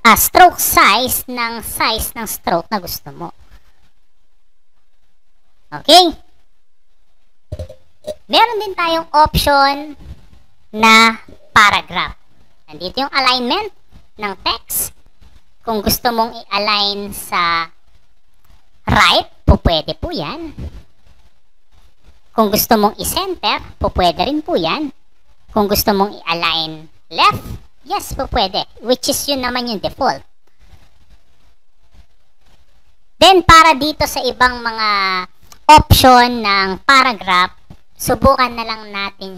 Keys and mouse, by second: 3.8 click, 4.8 click, 5.0 click, 5.2 click, 5.5 click, 8.2 click, 12.7 click, 16.4 click, 19.1 click, 20.7-21.7 drag, 22.9 click, 27.0 click, 28.5-29.7 drag.